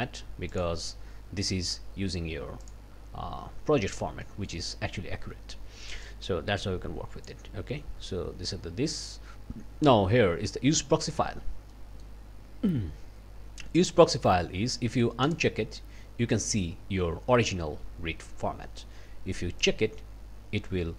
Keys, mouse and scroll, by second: 0.5 click, 2.6 click, 4.2 click, 6.0-7.4 drag, 11.7 click, 15.3 click, 19.6 click.